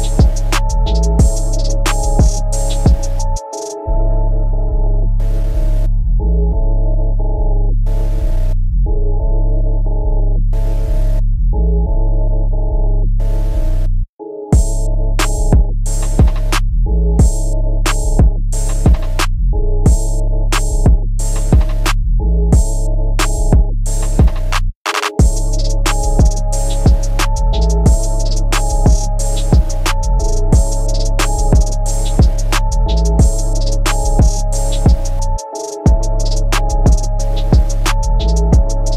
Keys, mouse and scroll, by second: 0.7 Up, 2.7 middle click, 3.8 shift+middle click, 4.2 middle click, 6.7 Left, 7.3 Down, 7.7 Right, 8.0 Right, 8.2 Right, 9.5 Down, 10.5 Right, 10.7 Right, 11.7 Right, 14.3 typing, 15.5 r, 16.9 click, 17.0 click, 17.4-18.0 typing, 20.6 click, 20.6 click, 20.9 scroll down 1, 21.0 middle click, 22.1 middle click, 24.6 Right, 24.8 Right, 25.0 Right, 27.9 Down, 28.7 ctrl+c, 28.9 Up, 29.4 ctrl+v, 30.3 Up, 31.0 Down, 32.6 Up, 35.5 shift+space, 36.5 Escape, 38.4 click.